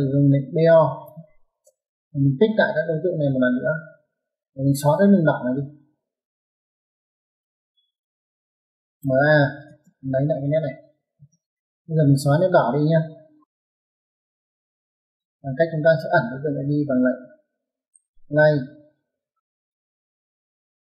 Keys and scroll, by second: 0.5-1.3 typing, 7.3 space, 8.7-9.4 typing, 10.9 space, 15.2 Escape, 15.4 Escape, 17.9-18.9 typing.